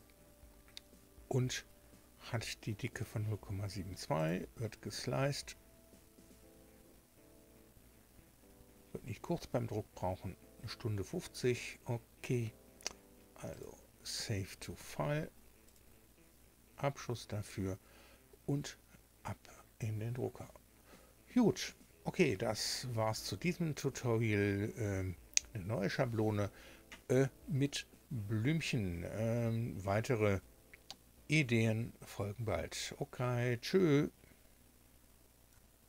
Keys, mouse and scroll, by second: 4.1 click, 13.4 click, 15.6 click.